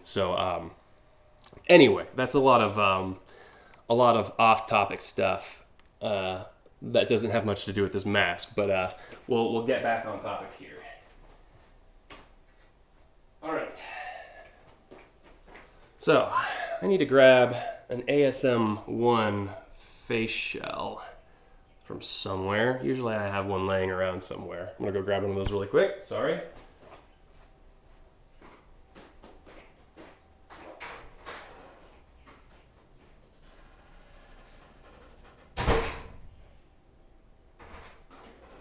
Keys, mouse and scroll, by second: 0.0-0.5 scroll down 2, 2.8-3.6 scroll up 4, 4.3-5.7 scroll up 4, 5.7 scroll down 2.